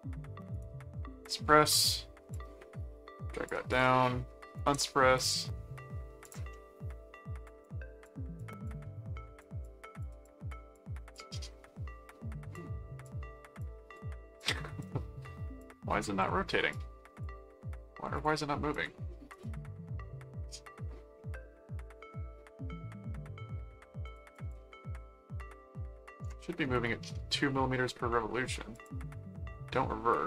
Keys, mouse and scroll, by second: 0.5 right click, 1.2 click, 2.3 click, 3.7 click, 4.5 right click, 5.1 click, 6.2 click, 6.5 middle click, 7.4 click, 8.1 click, 8.6 click, 9.6 click, 10.5 click, 12.5 click, 13.6 click, 14.4 click, 15.6 click, 16.7 click, 18.1-19.3 drag, 19.3 click, 24.0 click, 28.7 click, 29.5-30.2 middle drag.